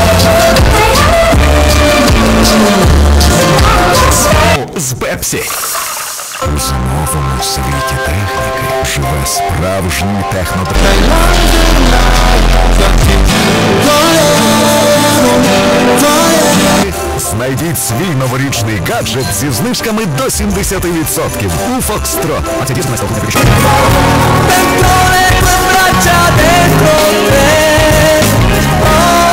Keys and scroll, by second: 4.6 Page_Down, 16.8 Page_Down.